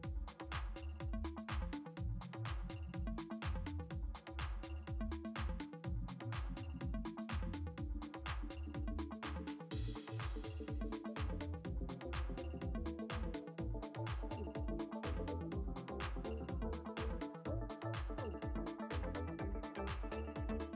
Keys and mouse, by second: 2.3 click, 7.2 alt+click, 9.7 click, 11.2 ctrl+z, 12.2 click, 14.2 ctrl+z, 19.9 click.